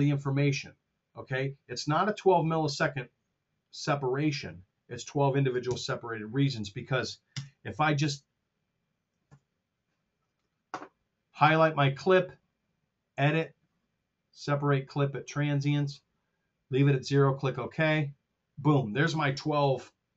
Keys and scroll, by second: 5.5 super+Tab, 7.2 KP_0, 9.2 super+..